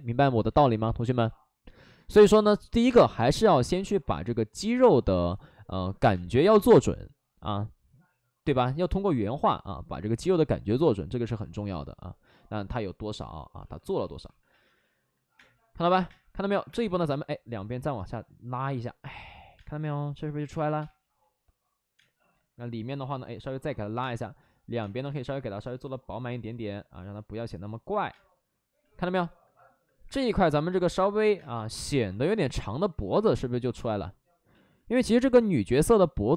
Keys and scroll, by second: 0.4 ctrl+z, 1.1 ctrl+z, 2.0 ctrl+z, 4.0 ctrl+z, 4.5 2, 4.5 3, 5.0 2, 6.0 space, 13.1 alt+s, 15.3 space, 16.0 space, 16.4 1, 16.6 space, 17.5 ctrl+z, 19.5-20.7 typing, 21.9 space, 22.3 ctrl+z, 22.9 ctrl+z, 23.8 2, 23.9 space, 24.7 space, 28.0 space, 28.8 space, 30.0 3, 30.0 space, 30.2 3, 31.9 alt+s, 32.8 ctrl+z, 32.8 1, 34.4 ctrl+z, 34.6 ctrl+z, 35.1 ctrl+z, 35.4 2.